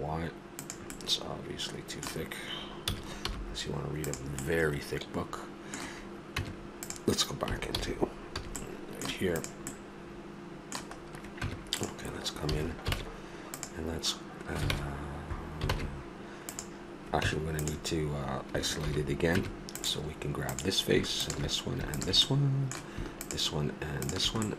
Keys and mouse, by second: 1.5-2.9 middle drag, 2.9 s, 4.9-6.4 middle drag, 6.4 Tab, 7.7 alt+h, 8.4 a, 9.4-10.9 right drag, 11.4 Tab, 12.5 a, 12.9 ctrl+Tab, 16.6 ctrl+Tab, 17.2 Tab, 18.8 shift+h, 19.3 Tab, 20.5-22.6 drag, 22.6-24.5 middle drag.